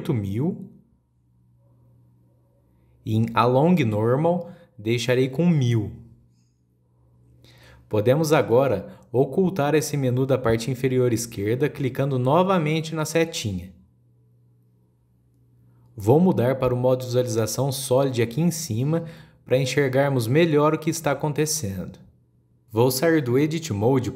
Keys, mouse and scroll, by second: 14.1-17.2 drag, 18.7 scroll up 1, 22.3 click, 23.4-24.1 middle drag.